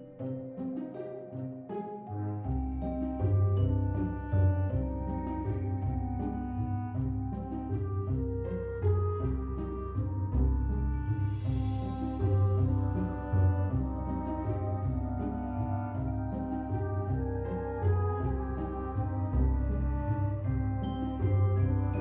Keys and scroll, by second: 2.3 ctrl+v, 3.1 ctrl+v, 3.8 ctrl+v, 7.4 ctrl+s, 9.6-10.6 typing, 11.7 ctrl+s, 20.4 p.